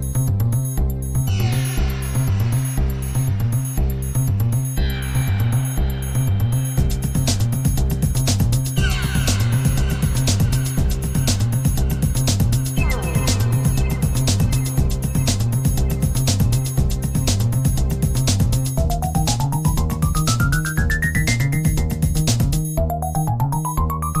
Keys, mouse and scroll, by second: 1.8-3.1 drag, 7.0-9.6 drag, 11.5-15.0 drag, 16.5-20.2 drag, 20.6-21.9 drag, 22.6 click.